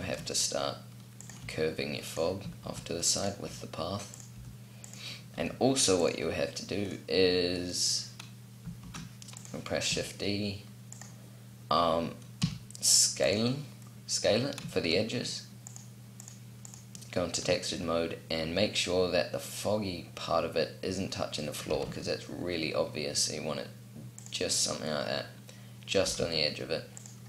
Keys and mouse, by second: 1.2 r, 2.4 shift+d, 3.2 r, 4.1 g, 5.1 r, 8.5 shift+d, 9.6 r, 12.2 s, 17.1-19.3 middle drag, 21.4 g, 25.8 g.